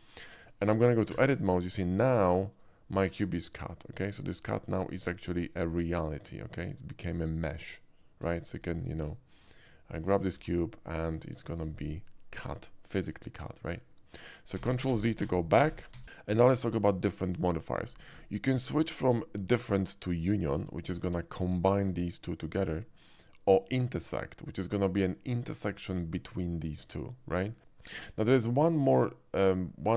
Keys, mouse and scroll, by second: 0.0 shift+middle click, 0.4 shift+click, 1.1 Tab, 2.5 click, 3.1 click, 4.0 click, 4.8 click, 5.3 click, 6.3 middle click, 8.2 Tab, 8.6 click, 9.0 click, 10.3 g, 11.4 right drag, 11.6 middle click, 11.9 middle click, 14.6 ctrl+z, 14.9 ctrl+z, 17.5 shift+middle click, 18.2-18.9 shift+middle drag, 20.6 click, 21.1-21.4 middle drag, 23.6 click, 24.4-25.7 middle drag, 27.6 ctrl+z, 28.6 shift+middle click, 29.3-29.9 shift+middle drag.